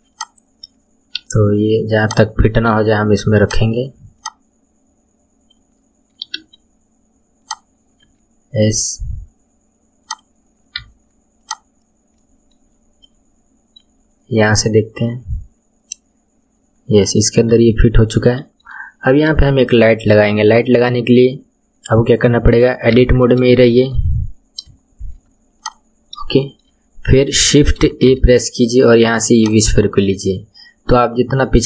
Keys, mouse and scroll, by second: 1.2 r, 2.7 s, 4.2 click, 6.4 r, 8.0 s, 10.8 Tab, 11.4 click, 12.2-12.7 middle drag, 12.7-13.0 scroll down 3, 13.0-14.0 middle drag, 14.0 scroll down 2, 14.8 scroll down 6, 15.0-17.5 middle drag, 17.5 KP_1, 17.9-18.3 scroll down 2, 18.3-19.1 shift+middle drag, 19.1-19.5 scroll down 1, 19.5-22.2 shift+middle drag, 22.2 scroll up 1, 23.0 Tab, 23.5 scroll up 1, 23.5 shift+middle click, 24.4 scroll up 3, 25.6 click, 25.9-26.4 scroll down 1, 26.4-28.1 shift+middle drag, 28.1 shift+a, 30.2-31.6 scroll down 1.